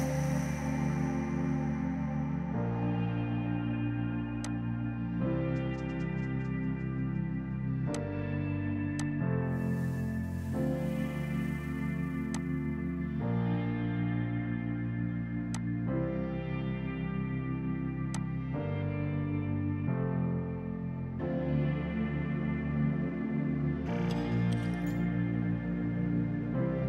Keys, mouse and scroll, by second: 4.5 click, 6.2 ctrl+z, 8.0 click, 10.0 KP_Decimal, 10.1 KP_5, 10.4 Return, 12.4 click, 15.2 ctrl+z, 15.6 click, 16.4 KP_4, 16.8 KP_Enter, 18.2 click.